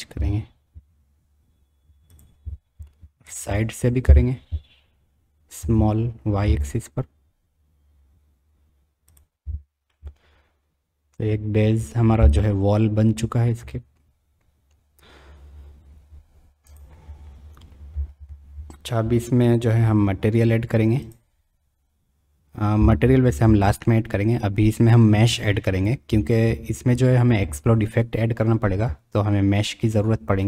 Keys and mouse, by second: 3.2 KP_1, 4.0 KP_3, 5.6 s, 9.9-11.9 middle drag, 11.8 click, 16.7 click, 24.6 click, 28.7 Tab.